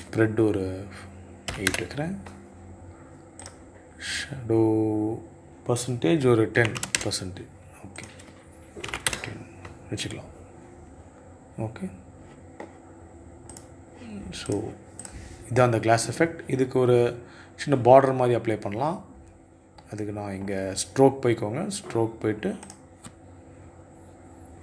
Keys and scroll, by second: 0.8 KP_8, 1.0 Return, 5.9 KP_1, 6.1 KP_0, 6.3 Return, 8.2 KP_1, 8.2 KP_5, 8.4 Return.